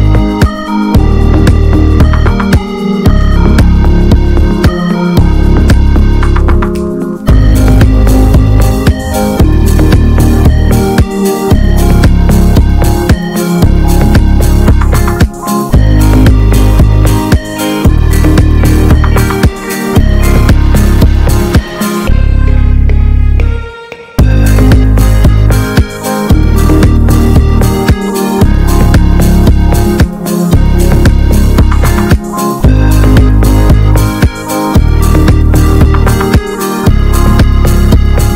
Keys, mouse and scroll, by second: 0.0 ctrl+s, 0.2 scroll up 2, 0.4 shift+middle click, 0.9-1.3 scroll up 1, 1.3 r, 2.5 ctrl+r, 3.4 Tab, 3.5 scroll down 2, 3.6 alt+middle click, 3.8 alt+middle click, 4.2 ctrl+s, 4.3 click, 4.5 scroll up 3, 4.7 Tab, 5.2 click, 5.6 l, 6.0 alt+middle click, 6.3 scroll up 5, 6.6 ctrl+s, 7.3 r, 8.5 click, 9.1 alt+middle click, 9.4 alt+middle click, 10.3 r, 11.2 alt+middle click, 11.5 scroll down 1, 11.8 alt+middle click, 12.4 click, 13.6 r, 14.3-15.3 scroll down 4, 14.5 alt+middle click, 15.3-16.3 scroll up 5, 15.5 alt+middle click, 16.3 middle click, 16.7 r, 17.5 alt+middle click, 17.7-18.8 scroll down 4, 17.9 Tab, 18.0 click, 18.8 ctrl+s, 19.0-19.3 scroll up 2, 19.3 ctrl+s, 19.5 Tab, 19.7 middle click, 20.0-20.4 scroll up 3, 20.4 click, 21.2 scroll down 2, 21.4 middle click, 21.6-22.5 scroll up 3, 22.5-23.7 drag, 23.9 alt+middle click, 24.1 alt+middle click, 24.5-25.2 scroll up 1, 25.2 r, 25.8 scroll down 2, 25.9 middle click, 26.3 Tab, 26.4 click, 26.7 alt+middle click, 27.1 ctrl+s, 27.2-27.5 scroll down 1, 27.5 shift+middle click, 27.8 scroll down 2, 28.0 ctrl+s, 28.2-28.6 scroll up 3, 28.4 shift+middle click, 28.6 Tab, 29.5 s, 31.0-31.3 scroll down 4, 31.3 Tab, 31.5 click, 32.0 ctrl+s, 32.3 shift+middle click, 32.8 ctrl+s, 33.0 click, 33.2 scroll up 3, 33.5 Tab, 33.8 alt+z, 34.3 click, 34.9-35.2 scroll up 1, 35.2 1, 35.6 click, 36.4 s, 38.1 Tab.